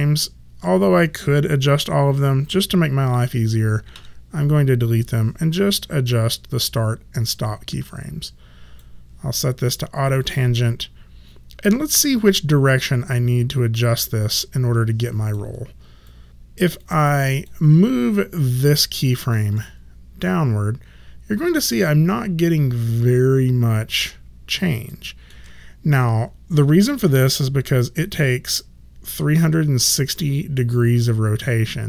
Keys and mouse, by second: 3.9 Delete, 7.3 click, 10.2 click, 16.0 click, 16.8 click, 19.5 shift+middle click, 24.0 shift+click.